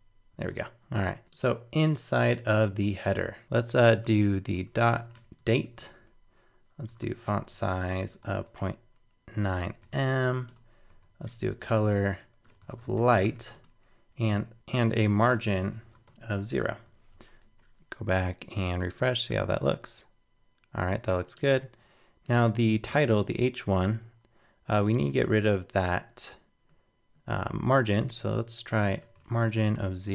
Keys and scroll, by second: 0.4 super+Tab, 4.0 super+Return, 17.1 super+s, 17.4 super+Tab, 19.3 super+r.